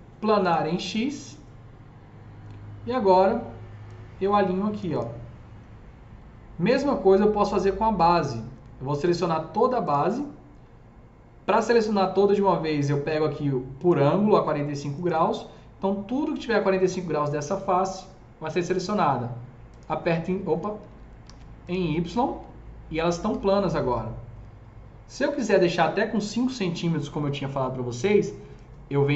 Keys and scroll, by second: 21.1 ctrl+z, 23.1 s.